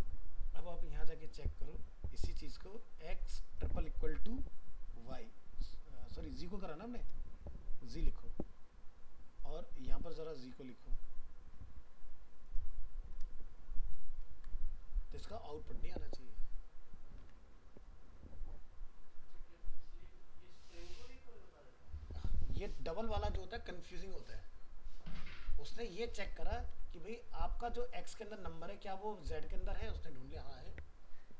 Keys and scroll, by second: 14.2 ctrl+s, 17.2 alt+Tab, 26.7 alt+Tab.